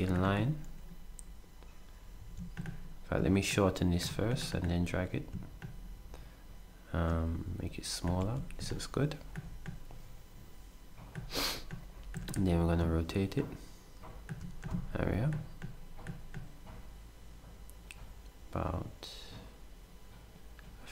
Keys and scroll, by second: 2.2 s, 8.2 s.